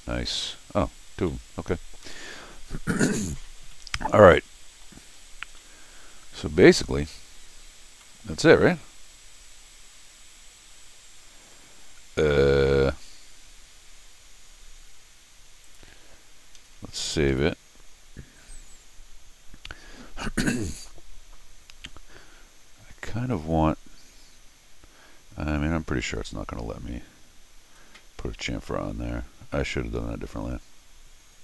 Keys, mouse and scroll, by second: 0.4 middle click, 1.3 middle click, 1.9 scroll down 1, 2.0 middle click, 2.5 scroll down 1, 3.1 middle click, 3.6 scroll down 1, 4.2 middle click, 5.1-5.6 scroll up 2, 5.6-7.0 middle drag, 7.4-8.0 scroll up 4, 8.0 middle click, 12.2 scroll down 1, 15.6 click, 16.6 Escape, 17.3 s, 26.0 y.